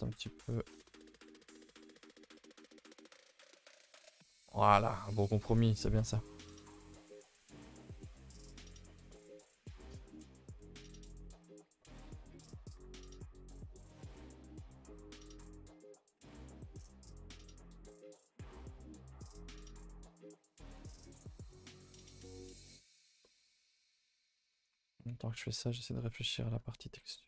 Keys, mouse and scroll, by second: 0.9 g, 1.7 middle click, 1.8 middle click, 2.1 middle click, 2.6 Tab, 2.9 KP_0, 6.1 middle click, 6.3-6.9 scroll up 3, 6.5 a, 6.6 a, 6.9 Tab, 7.2 click, 7.4 Tab, 7.6 shift+middle click, 7.8 scroll up 3, 8.0 a, 8.1 a, 8.7 l, 9.1-10.1 middle drag, 10.1 scroll up 2, 10.3 g, 12.4 middle click, 12.7 r, 14.6 middle click, 15.1 g, 17.4 r, 18.7-19.5 middle drag, 19.5 Tab, 19.7 middle drag, 19.9-20.5 middle drag, 20.6 middle click, 20.9 Tab, 21.0 middle click, 21.2-22.4 middle drag, 22.4 r, 23.2-24.8 middle drag, 24.8 r.